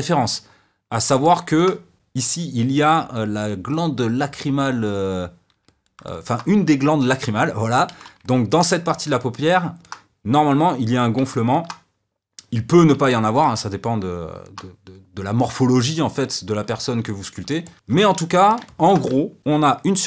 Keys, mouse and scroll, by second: 18.1 f, 18.6 middle click, 19.4-20.0 ctrl+drag.